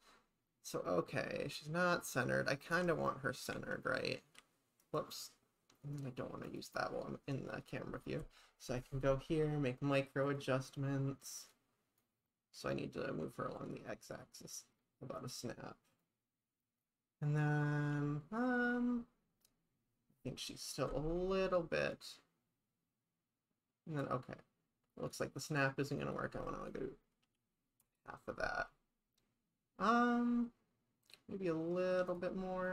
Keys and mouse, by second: 3.5 g, 4.4 x, 4.8 right click, 6.5 click, 9.1-10.4 drag, 10.8 click, 12.1-15.3 drag, 16.0 click, 20.9-25.2 drag, 25.4-28.6 drag, 32.1-32.7 drag.